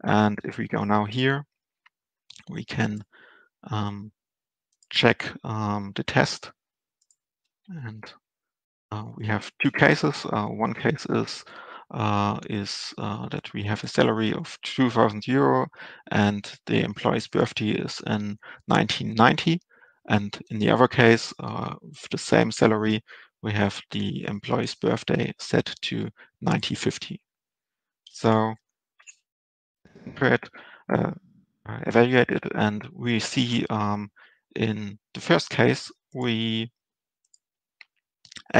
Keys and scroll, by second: 29.1 ctrl+alt+Return.